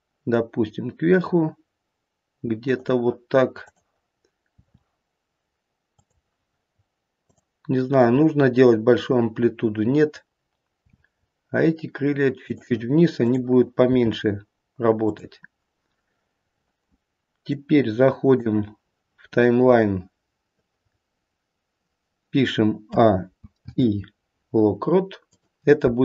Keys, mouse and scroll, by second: 3.6 click, 4.5 r, 7.2 click, 8.1-9.1 scroll up 2, 10.7 r, 13.1 click, 13.9 r, 15.5-16.3 scroll down 1, 16.3-17.0 scroll down 3, 17.4 click, 20.8-22.8 scroll up 1, 22.8-23.2 scroll up 2, 22.8 a, 23.5 i.